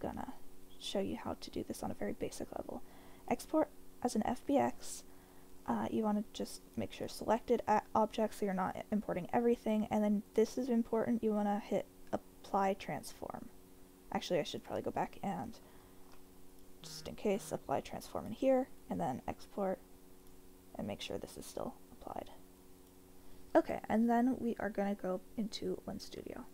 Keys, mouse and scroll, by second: 15.8 ctrl+a, 18.2-20.4 drag.